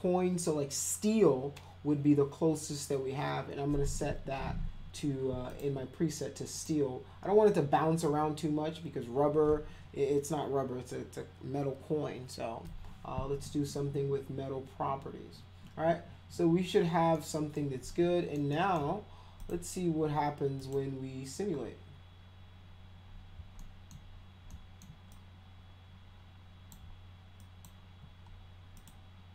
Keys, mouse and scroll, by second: 4.0 click, 5.5 click, 6.5 click, 17.1 middle click, 17.8 alt+middle click, 18.5 alt+middle click, 19.4 click, 20.6 click, 23.6 alt+middle click, 24.5-24.8 alt+middle drag, 25.1-26.7 drag, 27.4 alt+click, 28.7 click.